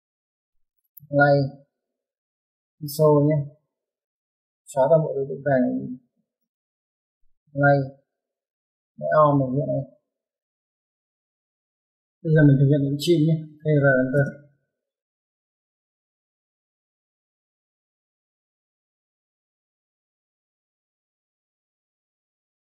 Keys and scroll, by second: 2.5 typing, 3.8-4.8 typing, 7.2 typing, 7.3 ctrl+z, 10.1-10.7 typing.